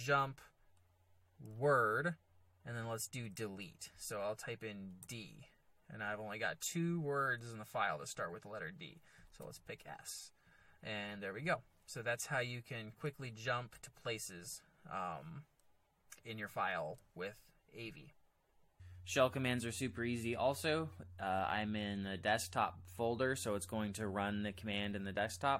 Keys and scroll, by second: 1.5 w, 5.0 d, 9.4 s, 12.2-13.7 typing.